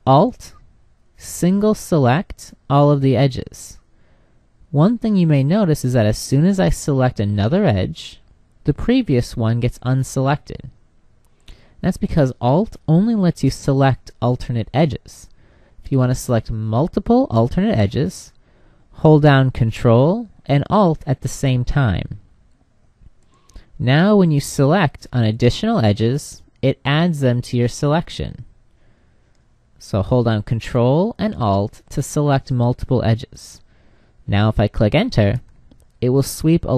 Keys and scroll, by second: 34.8 Return.